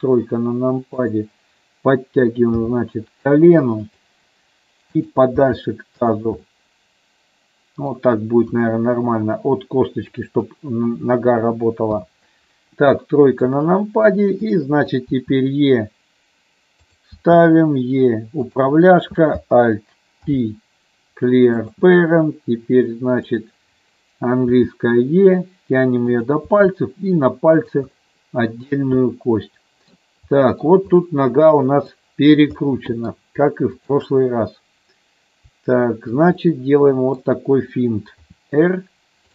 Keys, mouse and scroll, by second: 1.2 click, 2.7 g, 3.9 click, 6.7-8.0 middle drag, 8.5 KP_1, 12.1 KP_3, 13.1 shift+middle click, 14.7 click, 15.3 e, 17.3 e, 18.5 click, 20.4 alt+p, 23.4 click, 24.7 e, 26.1 click, 26.6 e, 27.8 click, 28.2 middle click, 29.2 middle click, 30.6 middle click, 31.1 click, 32.8 middle click, 33.9 shift+click, 36.5 middle click, 38.4 r.